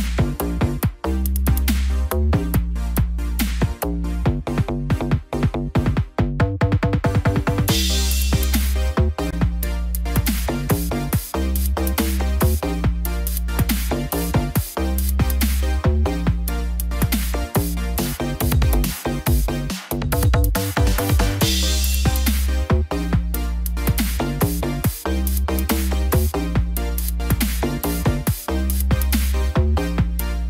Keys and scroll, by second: 7.0 ctrl+j.